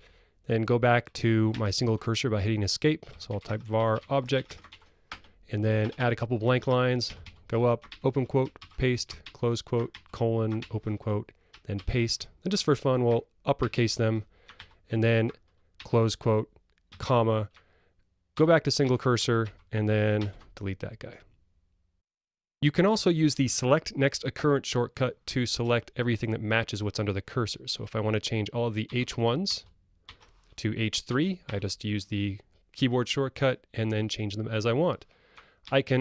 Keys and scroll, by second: 1.6 Escape, 13.6 ctrl+shift+super+u, 18.4 Escape, 28.9 ctrl+g, 35.7 Escape.